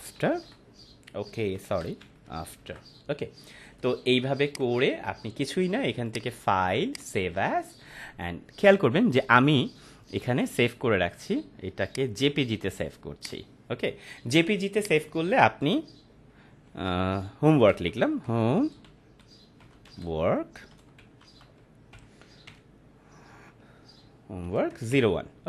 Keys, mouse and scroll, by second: 0.0-0.9 typing, 1.6 ctrl+a, 2.0-3.1 typing, 4.4 click, 4.8 Right, 6.0 click, 11.8-15.4 drag, 16.4-22.4 typing, 23.4 BackSpace.